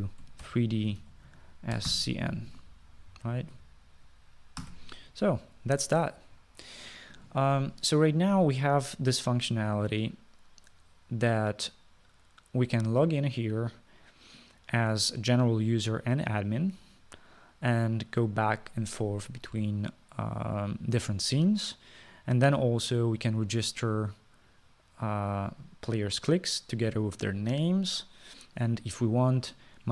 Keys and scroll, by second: 1.3-3.6 typing, 5.9 ctrl+s.